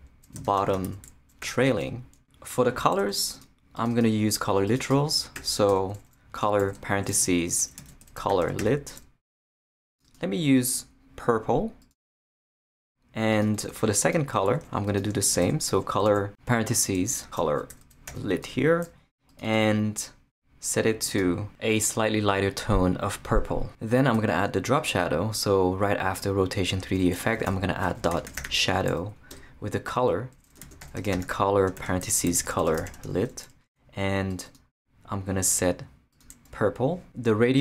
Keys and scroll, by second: 0.1-1.7 typing, 1.8 Return, 5.3-8.8 typing, 8.9 Return, 15.4-18.8 typing, 17.0 shift+Left, 18.9 Return, 26.7 Return, 27.5-28.9 typing, 29.0 Down, 29.3 Return, 30.6-33.2 typing.